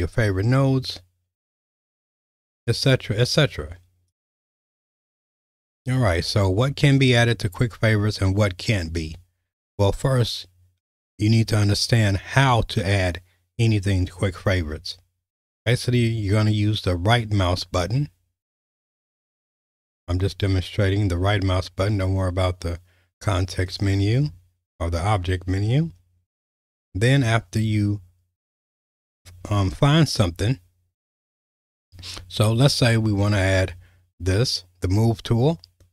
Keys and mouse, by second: 16.9-18.1 right drag, 19.0 right drag, 23.7-25.9 right drag.